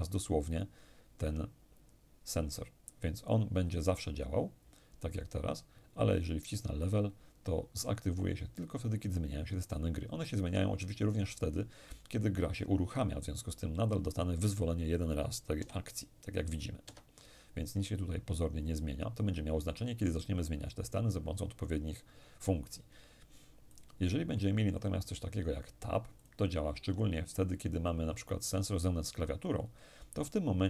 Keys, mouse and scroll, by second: 6.1 click, 15.2 p, 16.5 Escape, 23.4 click, 25.8 click.